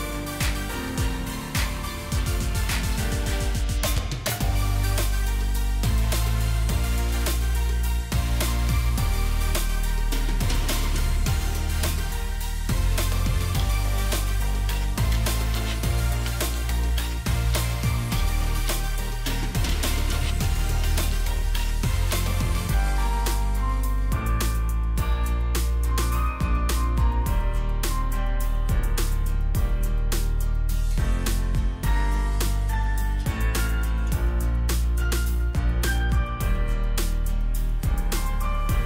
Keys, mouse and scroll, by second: 6.1-6.9 scroll up 1, 14.7 typing, 15.8 Tab, 16.5-17.0 typing, 17.5 Return, 20.2 alt+scroll down 1, 21.0-21.6 alt+scroll down 1, 25.2 shift+click, 28.3 double click, 30.7-31.0 alt+scroll up 2, 33.1 alt+click, 34.5 double click, 35.8-37.0 alt+scroll down 2, 38.5 alt+click.